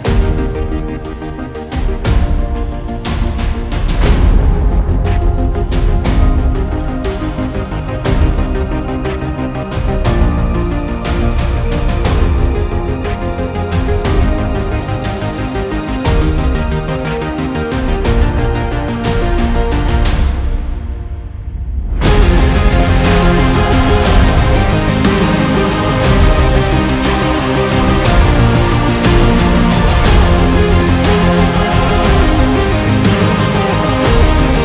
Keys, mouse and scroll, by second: 0.8 alt+scroll up 1, 1.0 alt+scroll down 1, 1.2 alt+scroll up 1, 1.3-1.7 alt+scroll down 2, 1.7 alt+scroll up 1, 2.0-2.3 alt+scroll down 1, 2.4-3.3 alt+scroll up 2, 4.6 alt+scroll up 1, 5.1 alt+scroll down 1, 7.0 double click, 9.6 alt+scroll down 1, 9.7 alt+scroll up 1, 10.0 alt+scroll down 1, 10.1 alt+scroll up 1, 10.3 shift+click, 11.3 ctrl+g, 11.6 right click, 12.5 alt+scroll down 1, 12.6-13.1 alt+scroll up 1, 13.2 alt+scroll up 1, 17.1-18.3 scroll down 1, 19.4 scroll up 1, 19.7 scroll down 1, 19.8-20.6 scroll up 1, 20.6-21.5 scroll down 1, 21.8-22.6 scroll up 1, 22.8-23.7 scroll down 1, 25.9-28.7 scroll down 1, 30.2-33.1 scroll down 1, 33.1-33.7 scroll up 1, 33.9-34.6 scroll up 1.